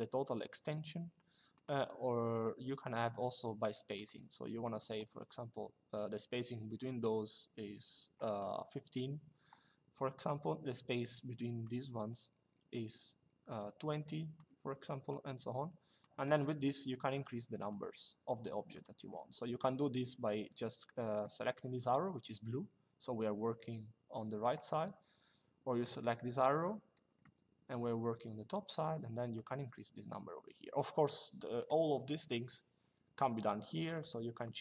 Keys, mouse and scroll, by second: 1.2 click, 3.7 click, 11.3 click, 14.8 click, 16.9 click, 18.4 click, 25.5 click, 26.9 middle click, 29.0 click, 33.6 click.